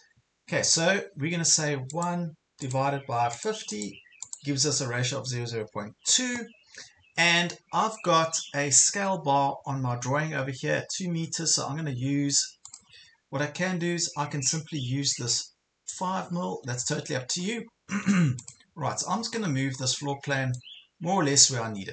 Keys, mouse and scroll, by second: 0.0 Return, 1.9 click, 13.9 ctrl+scroll up 1, 16.1 ctrl+scroll down 1, 16.7 scroll down 1, 17.4 ctrl+scroll down 1, 17.7 ctrl+scroll up 1, 18.5 click, 19.4 scroll up 1, 20.5-21.9 drag.